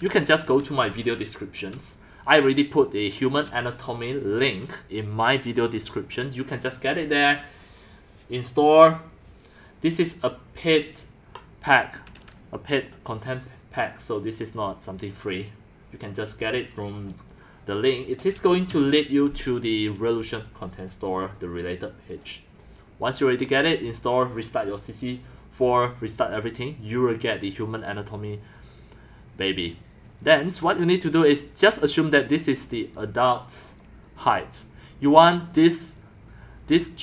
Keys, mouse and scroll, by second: 5.7 click, 32.4-32.8 drag.